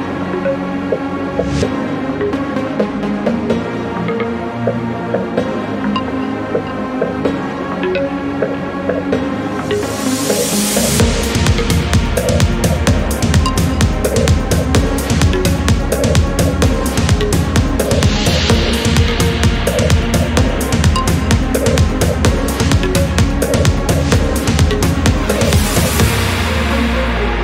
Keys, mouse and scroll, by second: 3.3 click, 4.4 click, 6.0 scroll up 2, 8.6-9.0 scroll up 2, 11.6 scroll down 2, 12.0-12.3 scroll up 2, 15.2 ctrl+click, 16.0 ctrl+scroll down 2, 17.8 ctrl+click, 18.4 ctrl+scroll down 2, 19.2 ctrl+scroll up 2, 22.5 ctrl+click, 25.6 ctrl+scroll up 2.